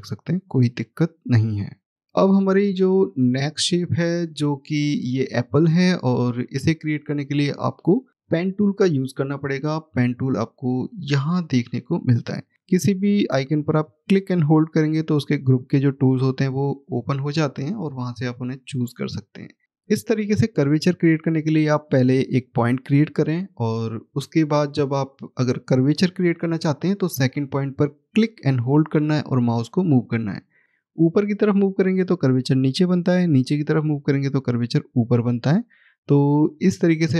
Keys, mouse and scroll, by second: 3.3 scroll up 1, 4.5 middle click, 10.1 click, 17.9 click, 22.2 click, 28.0 click.